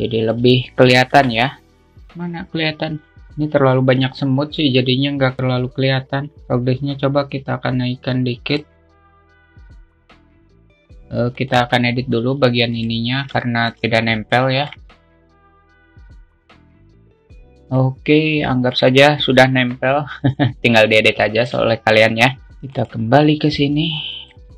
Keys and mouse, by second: 0.6 click, 1.6 KP_0, 5.8 click, 6.8-8.9 drag, 10.8 click, 11.9 click, 13.2-13.7 drag, 13.9-14.3 alt+shift+middle drag, 14.8 middle click, 15.2 click, 15.2 a, 15.5 ctrl+click, 15.6 alt+middle click, 15.7 click, 16.0 alt+shift+middle click, 16.2 click, 16.6 g, 16.7 alt+middle click, 16.9 click, 17.1 middle click, 17.3 click, 17.9-18.3 alt+middle drag, 19.0 middle click, 20.0 KP_0, 21.9 click, 22.3 alt+shift+middle click.